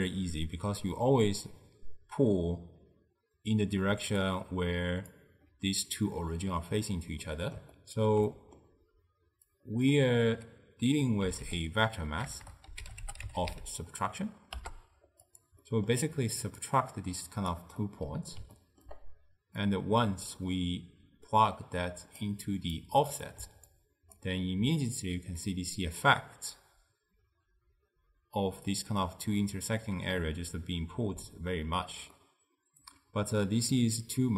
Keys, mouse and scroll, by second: 3.9 d, 4.3-5.2 drag, 5.2-5.5 d, 7.3-9.6 middle drag, 9.6 click, 12.5 BackSpace, 15.7 middle click, 16.7 drag, 17.9-19.8 middle drag, 19.8 click, 22.8 click, 23.8 ctrl+right click, 25.5-28.5 middle drag, 31.3 d, 32.2-33.8 middle drag, 33.8 click.